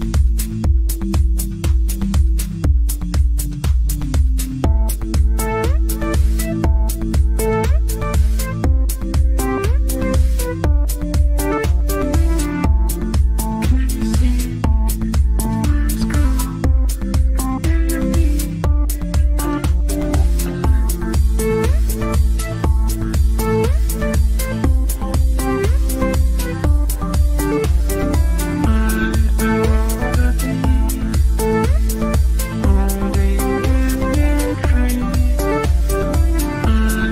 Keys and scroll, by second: 15.2 Delete.